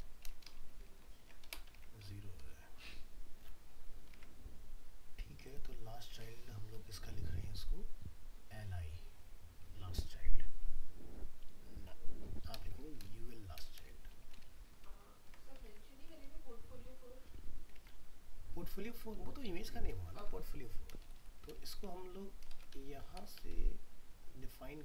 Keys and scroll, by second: 0.9 ctrl+s, 1.7 alt+Tab, 14.9 ctrl+s, 15.7 alt+Tab.